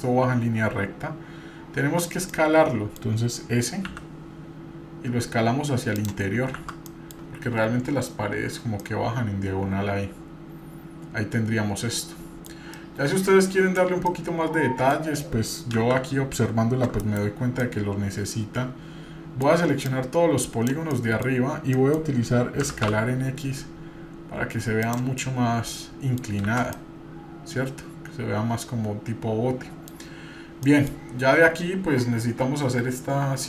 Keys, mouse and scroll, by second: 2.3 middle click, 3.9 s, 6.9 middle click, 6.9 shift+z, 8.8-12.5 middle drag, 12.7-13.8 middle drag, 14.1 middle click, 15.7 shift+z, 17.6-19.5 middle drag, 19.5-20.7 drag, 21.0 middle click, 21.7 middle click, 22.0 click, 22.6 s, 25.2-26.2 middle drag, 26.5 shift+z, 26.8-30.9 middle drag, 31.1-31.5 scroll up 2.